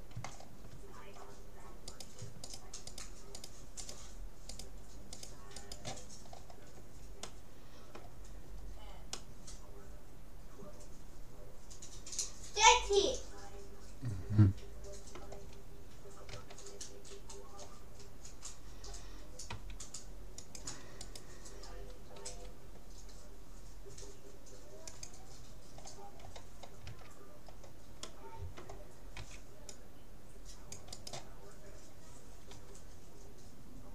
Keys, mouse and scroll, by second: 0.2 scroll up 1, 0.4-1.8 scroll down 1, 1.8 middle click, 2.0-7.4 right drag, 6.4-11.0 middle drag, 16.3 a, 17.2 middle click, 19.6 c, 21.2-23.0 right drag, 22.4 g, 25.8-26.9 middle drag, 26.9 a, 29.2 c, 31.2-32.8 right drag, 32.6 g.